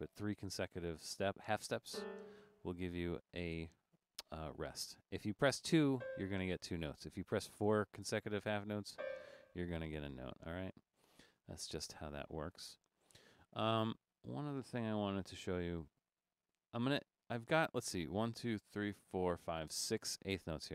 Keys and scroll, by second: 15.2 BackSpace, 15.6 Left, 16.1 BackSpace, 17.1 Left, 17.3 Left, 17.4 Left, 17.9 Left, 19.0 Right, 19.3 Right, 19.7 Right.